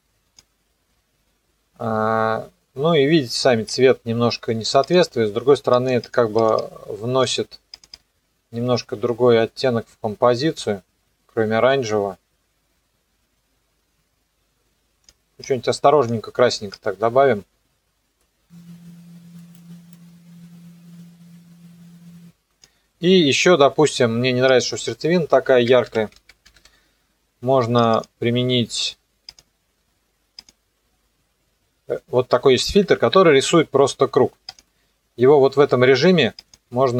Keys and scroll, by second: 25.1-27.1 typing.